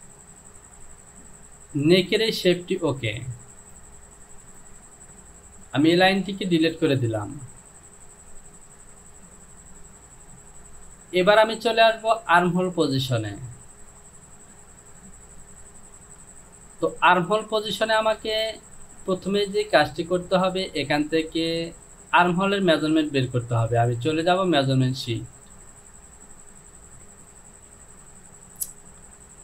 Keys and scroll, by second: 5.9 Delete, 10.8 Home, 14.7 Delete.